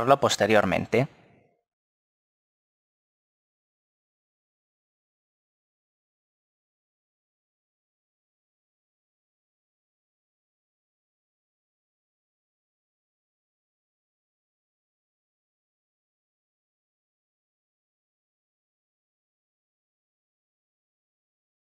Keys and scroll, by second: 16.6 KP_0.